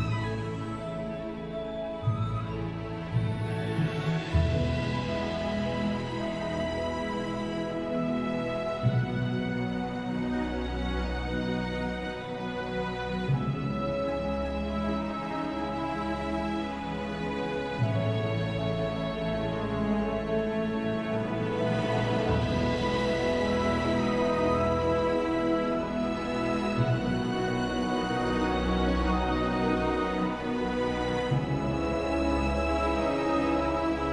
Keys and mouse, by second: 1.2 alt+middle click, 1.2 ctrl+z, 1.5 shift+middle click, 1.9 shift+middle click, 2.0 alt+middle drag, 2.4 alt+shift+middle click, 2.5 alt+shift+middle click, 3.0 shift+middle click, 3.1 shift+middle click, 3.6 click, 4.5 shift+drag, 4.6 shift+click, 4.9 alt+shift+middle drag, 4.9 f, 5.0 drag, 5.3 shift+click, 5.5 f, 5.5 space, 5.6 click, 6.3 middle click, 6.5 middle click, 6.8 click, 7.0 alt+middle click, 7.3 alt+middle click, 7.5 alt+middle click, 7.7 alt+shift+middle click, 7.8 shift+click, 8.4 click, 8.5 shift+click, 9.0 alt+middle click, 9.5 alt+shift+f, 9.5-10.5 middle drag, 10.6 alt+middle drag, 10.7 alt+middle click, 10.9 middle click, 11.2 shift+click, 11.3 alt+middle click, 11.9 click, 12.3 shift+click, 12.6 click, 12.6 f, 12.8 click, 13.4 click, 13.4 e, 14.5 drag, 14.9 alt+middle click, 15.5 alt+shift+Tab, 15.9 alt+middle click, 16.1 alt+shift+middle click, 16.3 Tab, 16.3 alt+middle click, 16.5-17.1 alt+middle drag, 17.3 alt+middle click, 17.4 alt+middle click, 17.7 alt+middle click, 17.9 alt+shift+middle click, 18.2 alt+shift+Tab, 18.2 middle click, 18.7 shift+click, 18.8 alt+shift+middle click, 19.0 alt+shift+middle click, 19.1 click, 20.0 alt+middle drag, 20.2 click, 20.4 shift+middle click, 20.8 click, 21.0 shift+middle click, 21.2 alt+middle click, 21.5 click, 21.6 alt+middle click, 22.2 click, 22.4 alt+shift+middle click, 22.6 click, 22.8 shift+middle click, 22.9 click, 23.3-23.6 middle drag, 23.7 click, 23.8 alt+middle click, 24.0 shift+middle click, 24.2 alt+shift+middle drag, 24.9 alt+shift+s, 24.9 middle click, 25.0-25.4 drag, 25.4-25.7 alt+shift+middle drag, 25.8 click, 26.0 click, 26.6 alt+shift+middle click, 26.9 alt+middle click, 27.3 alt+shift+middle click, 28.0 click, 28.1 shift+space, 28.6 shift+middle click, 28.9 alt+shift+middle click, 29.6 alt+shift+middle click, 29.9 alt+shift+middle click, 30.2 alt+shift+middle click, 30.4 click, 30.7 alt+middle click, 30.9 click, 31.6 alt+shift+e, 31.6 alt+shift+middle click, 31.8 click, 31.9 shift+middle click, 32.0 click, 32.8 click, 33.9-34.1 alt+middle drag.